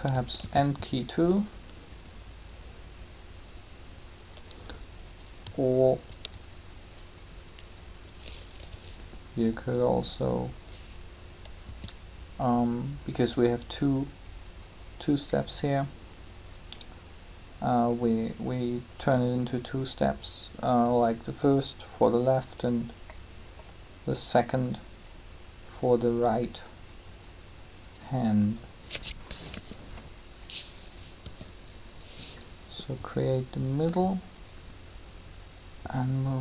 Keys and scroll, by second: 0.4 shift+d, 8.5 g, 11.6 s, 29.3 3.